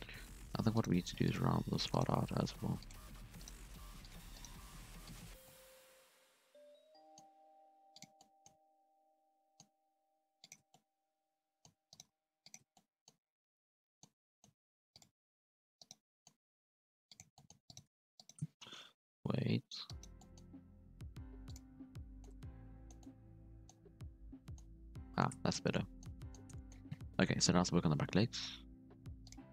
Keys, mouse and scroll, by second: 0.7 right click, 0.9 g, 1.9 right click, 2.1 g, 3.4 right click, 3.5 g, 4.3 right click, 4.5 g, 5.3 scroll down 1, 5.4-7.2 middle drag, 7.2 scroll up 4, 7.4 g, 8.1-8.5 middle drag, 8.5 Tab, 8.6 scroll down 3, 8.7-9.7 middle drag, 9.7 Tab, 9.9 scroll up 2, 10.1 g, 10.6 Tab, 10.7-11.7 middle drag, 11.7 Tab, 11.9 right click, 12.1 g, 12.6 Tab, 12.7-13.1 middle drag, 13.1 scroll down 1, 13.2-14.1 middle drag, 14.1 Tab, 14.2 middle drag, 14.5 scroll up 1, 14.6 g, 15.8 right click, 16.0 middle click, 16.4 g, 17.3 middle click, 17.7 right click, 18.2 shift+right click, 19.0 j, 19.2-19.8 scroll up 4, 19.8 right click, 20.1 middle click, 20.5 g, 21.8 scroll down 1, 22.0 middle click, 22.3 Tab, 22.4-23.7 middle drag, 23.7 scroll down 4, 23.9-24.8 middle drag, 24.8 scroll down 4, 25.0-25.5 middle drag, 25.5 scroll up 1, 25.7 middle drag, 26.0 scroll down 1, 26.1-26.8 middle drag, 26.8-27.3 scroll up 1, 27.3 KP_1, 27.5 KP_3.